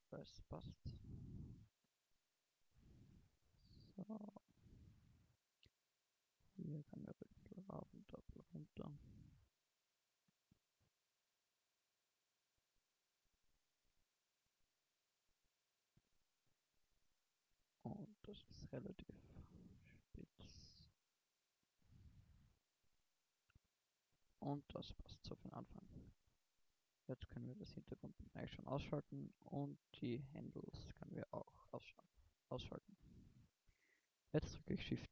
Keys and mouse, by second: 0.5 a, 12.2-14.3 middle drag, 17.7 s, 25.1 a, 25.8 a, 27.3-28.4 drag, 28.4-30.2 middle drag, 31.5 middle click, 31.9 middle click, 34.5 shift+d.